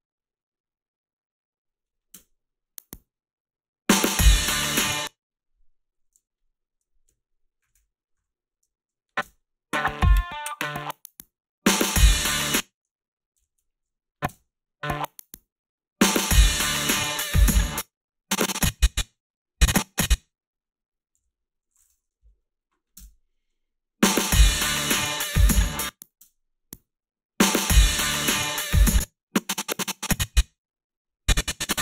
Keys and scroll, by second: 2.2 space, 4.8 space, 7.6 shift+,, 8.2 shift+,, 9.2 space, 12.4 space, 13.3 ctrl+z, 14.3 space, 17.5 space, 21.2 g, 22.3 Delete, 22.9 space, 25.6 space, 26.2 space, 28.5 space.